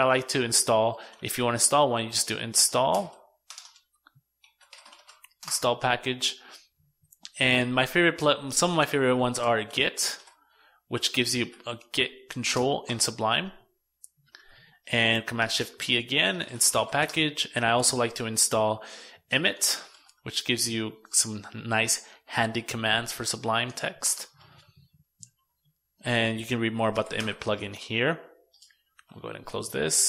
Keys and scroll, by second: 14.1 shift+super+p, 27.7 super+w, 29.3 super+n.